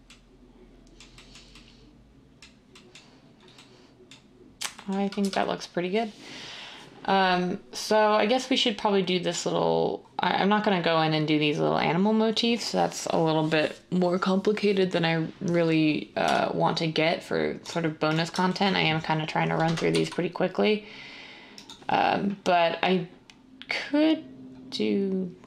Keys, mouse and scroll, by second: 5.2 1, 16.3 Tab, 19.9 s.